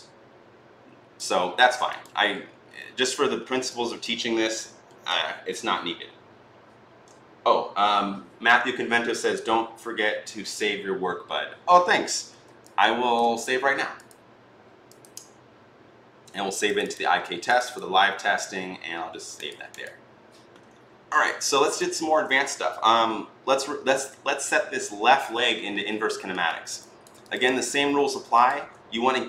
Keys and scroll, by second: 1.3 ctrl+z.